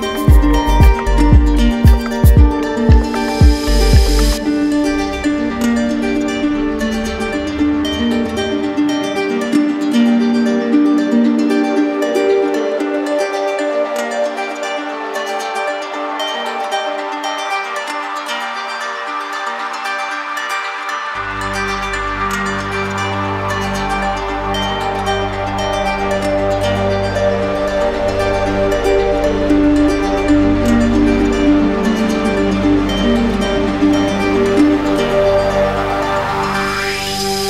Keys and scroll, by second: 15.1 ctrl+alt+shift+e.